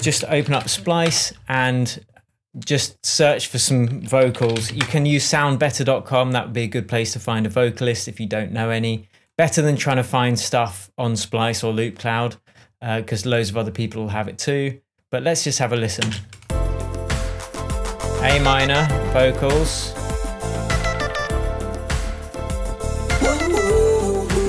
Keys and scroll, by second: 0.4 alt+space, 0.4-1.6 typing, 4.4-5.5 typing, 16.4 space.